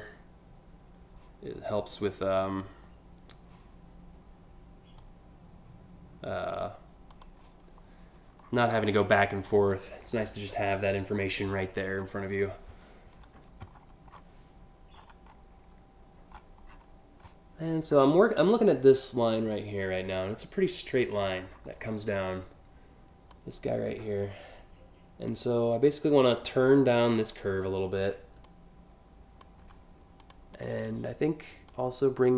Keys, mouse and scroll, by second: 2.3-4.7 drag, 6.7 click, 8.0-8.6 scroll down 2, 9.1 scroll up 2, 9.9 scroll up 1, 10.1 scroll down 3, 11.2-12.1 scroll down 4, 12.2 scroll up 1, 13.4 scroll up 3, 13.8 scroll down 3, 14.6-15.2 scroll up 5, 16.0 scroll up 1, 16.3 scroll down 1, 21.1-21.6 scroll down 4, 22.9-24.0 drag, 24.9-26.9 drag, 28.1-29.1 drag, 29.8 click, 30.2 click, 31.3-32.3 drag.